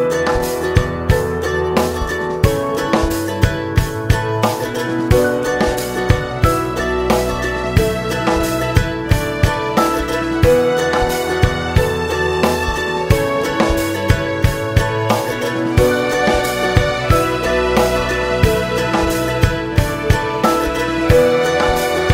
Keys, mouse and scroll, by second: 0.0 click, 0.2 ctrl+m, 0.9 click, 1.2 g, 2.8 click, 3.0 a, 3.5 s, 5.7 right click, 6.3 s, 7.4 click, 7.7 g, 9.2 click, 9.4 a, 10.0 g, 10.8 right click, 11.3 l, 11.6 g, 12.4 click, 13.2 Tab, 13.3 click, 15.9 click, 16.4 l, 20.2 Tab, 22.0 Tab.